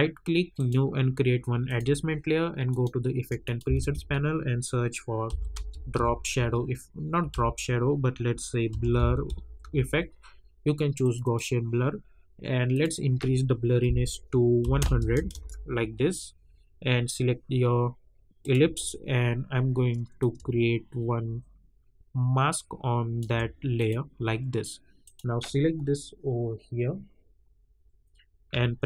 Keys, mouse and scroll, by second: 0.5 click, 3.9 ctrl+a, 5.0-6.4 typing, 7.3 ctrl+a, 8.4-10.1 typing, 11.0 click, 15.3 Return, 18.4-23.7 drag.